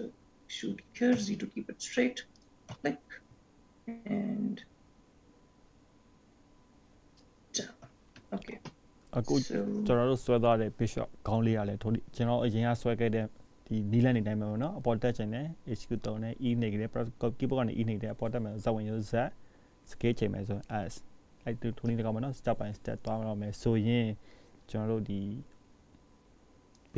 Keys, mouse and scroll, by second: 3.0 s, 8.5 ctrl+s, 16.8-17.8 scroll up 5, 17.8-18.3 scroll down 5, 18.2 scroll up 1, 19.4 middle click, 24.1 shift+middle click.